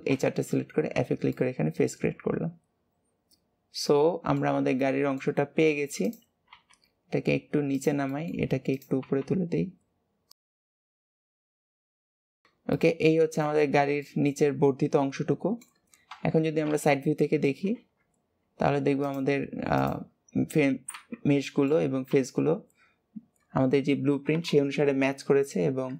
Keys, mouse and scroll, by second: 1.0 Tab, 1.2-4.3 middle drag, 4.7 middle click, 5.4-6.0 scroll up 1, 6.0 click, 8.1 middle click, 8.6 click, 10.4 middle click, 10.7 g, 11.3 middle click, 11.6 click, 11.8 middle click, 12.0 g, 12.7 middle click, 13.6-14.0 scroll down 2, 14.0-16.0 middle drag, 16.0 KP_1, 17.7 alt+z, 19.0 click, 19.7 click, 20.9 Tab, 21.3 shift+middle click, 22.1 a.